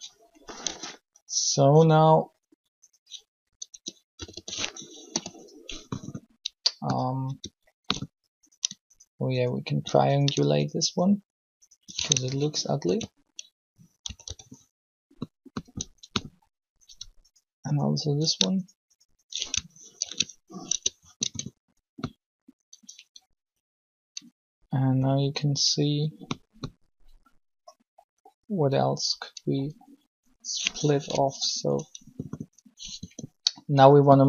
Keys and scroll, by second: 0.6 Tab, 3.7 Tab, 3.9-4.9 typing, 12.6 ctrl+shift+t, 14.0 typing, 15.6 Tab, 15.9 Tab, 20.0 ctrl+shift+t, 20.7 Tab, 21.2 Tab, 24.9 typing, 30.9 u, 33.0 r.